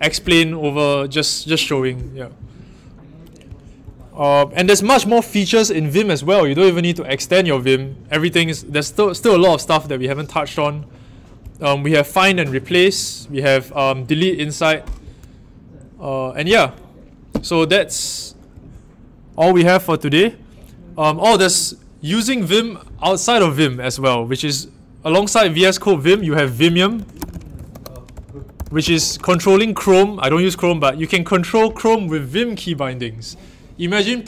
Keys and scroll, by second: 26.9-29.3 typing.